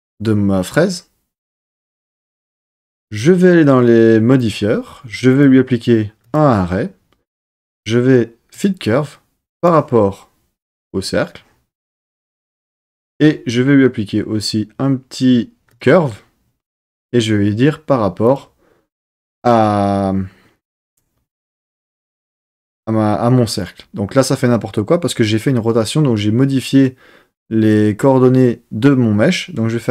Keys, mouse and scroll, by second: 4.3 click, 5.3-6.3 drag, 7.3-8.6 drag, 9.5 click, 12.4 click, 13.0-15.8 drag, 16.8 click, 23.0-23.9 middle drag, 24.2-29.9 middle drag.